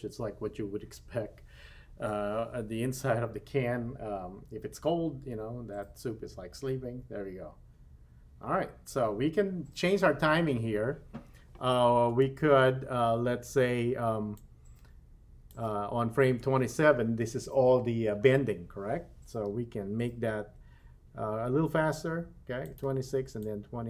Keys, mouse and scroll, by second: 12.2 space, 14.3-15.6 drag, 20.5 g, 23.4 click.